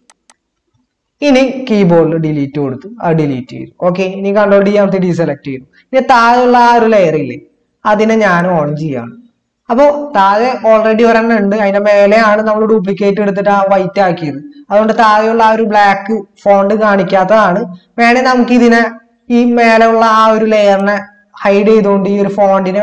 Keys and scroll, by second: 2.1 Delete, 4.5 ctrl+d.